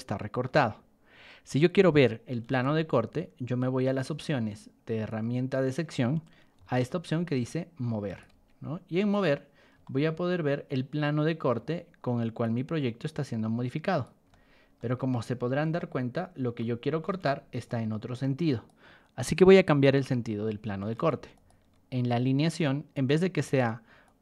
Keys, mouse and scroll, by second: 2.5 ctrl+1, 3.8 click, 5.0 ctrl+click, 6.5 r, 7.4 ctrl+click, 8.3 Escape, 9.1 click, 9.8-11.4 shift+middle drag, 12.4-14.0 drag, 14.3-14.7 shift+middle drag, 14.9 middle click, 15.7 shift+middle click, 17.0 ctrl+2, 17.6-18.6 drag, 19.9 Escape, 21.0 ctrl+1, 21.3 click, 22.4 ctrl+click, 23.3 Escape, 24.0 click.